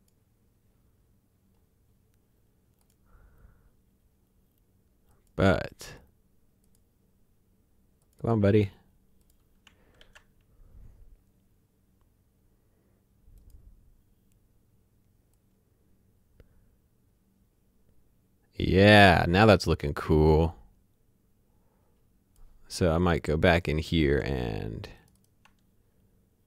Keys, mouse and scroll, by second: 4.2 click, 5.1 click, 6.6 click, 10.0 ctrl+s, 13.4 click, 15.3 click, 24.9 ctrl+click.